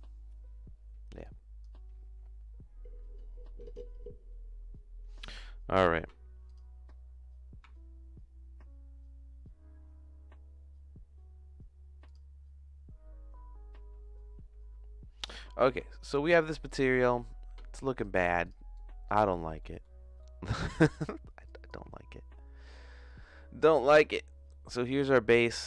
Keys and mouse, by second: 1.2 click, 18.1 click, 18.7 click, 19.6 middle click, 20.2 middle click, 21.4 click, 22.7 middle click, 24.5 click.